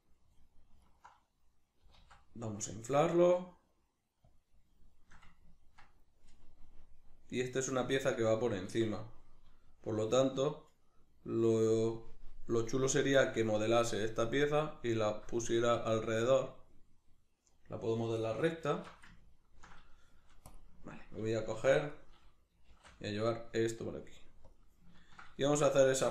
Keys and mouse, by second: 0.4 click, 0.8 alt+right click, 2.0 alt+s, 4.4 click, 4.9-20.5 shift+middle drag, 20.5 click, 20.8-21.9 ctrl+middle drag, 21.6 1, 21.9 right click, 22.7 shift+d, 23.5 click, 25.0-26.1 ctrl+middle drag.